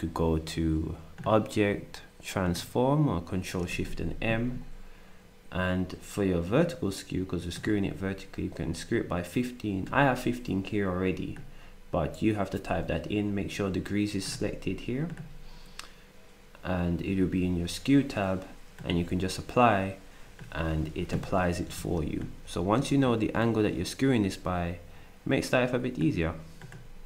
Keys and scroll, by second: 21.8 ctrl+z, 22.9 ctrl+z.